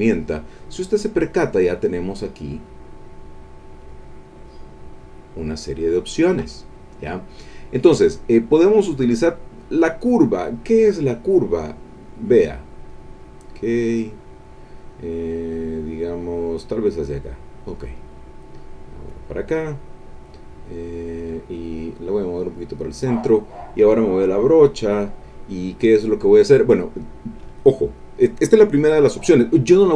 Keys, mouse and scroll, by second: 4.4 click, 9.6 click, 11.5-13.1 drag, 13.5 click, 17.1 click, 19.1 click, 21.7-23.0 drag, 24.4 click.